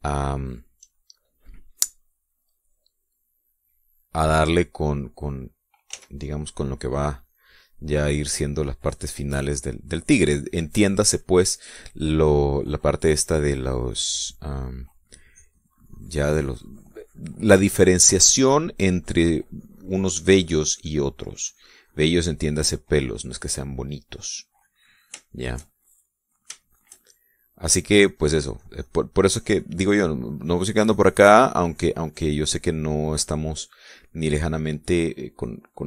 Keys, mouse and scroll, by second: 0.9 shift+middle click, 1.4 shift+middle click, 2.1 shift+middle click, 3.8-4.9 drag, 6.9 f, 7.3 click, 8.1-10.1 drag, 10.2-11.7 drag, 15.0 middle click, 16.3-19.9 drag, 22.4-26.0 drag, 26.3 shift+middle click, 26.8 shift+middle click, 27.7 shift+middle click, 28.7-30.7 drag, 30.9-33.3 drag, 33.3 middle click, 33.8 middle click, 34.7-35.8 drag.